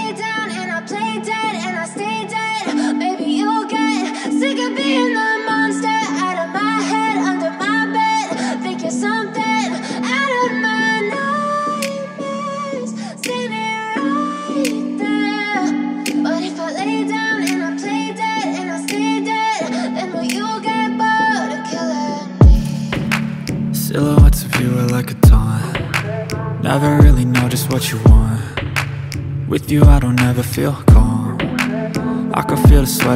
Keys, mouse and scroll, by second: 1.4 shift+click, 10.7 right click, 11.2 click, 15.7-25.2 alt+shift+drag, 26.2 click, 29.2 click, 32.6 click.